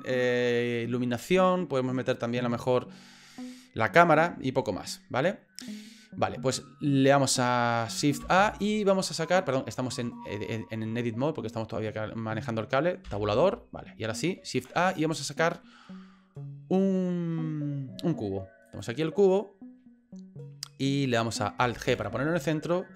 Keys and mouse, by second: 8.2 shift+a, 13.0 Tab, 14.5 shift+a, 21.9 alt+g.